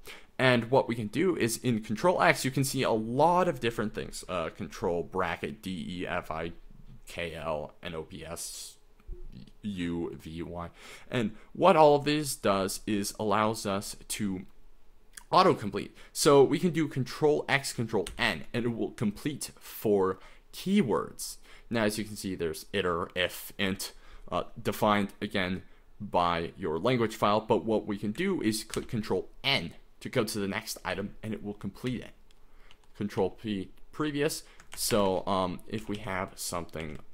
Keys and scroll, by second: 18.1 ctrl+n, 28.8 ctrl+n, 30.9 ctrl+n, 31.9 ctrl+n, 32.7 ctrl+p, 33.2 ctrl+p, 34.0 ctrl+m, 34.9-37.0 typing, 35.1 Escape.